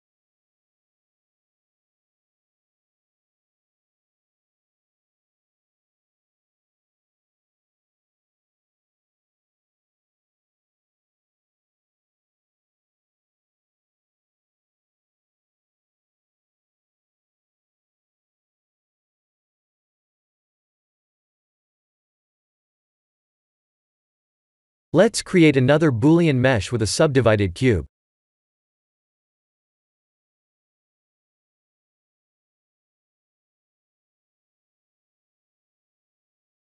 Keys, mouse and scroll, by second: 2.9 middle click, 3.0 middle click, 3.2 middle click, 4.0 middle click, 4.3 middle click, 4.8-6.0 scroll down 1, 6.0-7.5 scroll down 1, 8.0 middle click, 8.3 middle click, 9.5 middle click, 9.9 middle click, 10.0 middle click, 10.1 middle click, 10.2 middle click, 11.0-11.3 scroll down 3, 11.8 middle click, 12.6 middle click, 13.2-14.7 middle click, 15.7-16.4 scroll up 3, 16.2 middle click, 16.4 middle click, 16.6 middle click, 16.7 middle click, 17.3 KP_3, 20.5 middle click, 21.1 middle click, 21.3 middle click, 22.2-22.8 middle click, 22.4 middle click, 22.6 middle click, 22.9 middle click, 23.4 click, 24.6 KP_7, 25.5 shift+a, 27.2 click, 27.7 click, 29.7 click, 30.3 click, 33.9 click, 36.2 click.